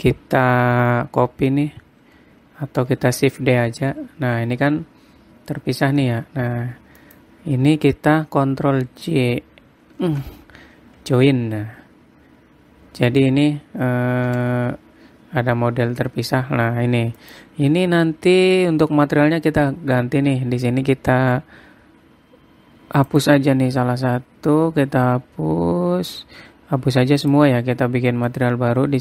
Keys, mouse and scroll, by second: 3.5 shift+d, 10.6 ctrl+j, 14.8 g, 20.0-21.1 scroll up 22, 21.1 scroll down 1, 23.6 click, 27.8 click, 28.8 click.